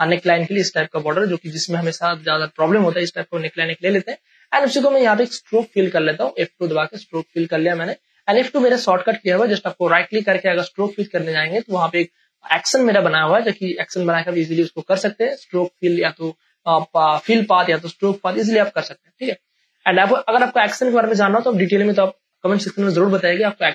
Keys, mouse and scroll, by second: 6.4 F2, 7.2 space, 7.5 ctrl+click, 9.2 ctrl+alt+z, 9.7 right click, 19.0 click, 19.3 space, 19.7-23.6 ctrl+drag, 23.6 space.